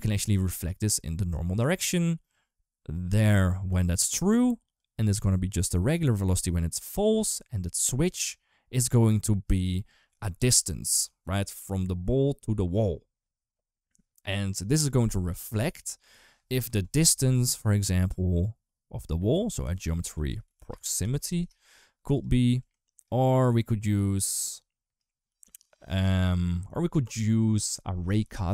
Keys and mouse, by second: 0.7 click, 2.7-3.7 drag, 4.6-5.8 drag, 6.1 click, 18.7-22.0 drag, 22.4 click, 24.4 click, 25.1 g, 25.8 click.